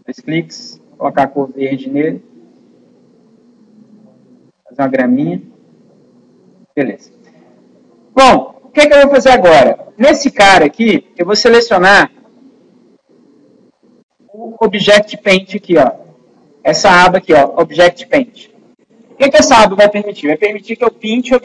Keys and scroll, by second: 14.0 super+u.